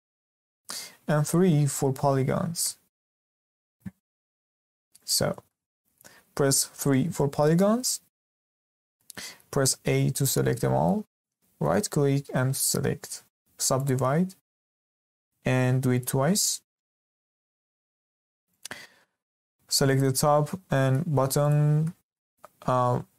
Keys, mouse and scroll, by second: 4.9 click, 5.5-6.6 middle drag, 6.6 3, 9.0-9.6 middle drag, 9.6 a, 10.5-11.6 middle drag, 11.6-16.7 right drag, 16.7-18.5 middle drag, 18.5 click, 19.8 click, 20.3-21.4 middle drag, 21.4 shift+click, 22.1-23.1 middle drag.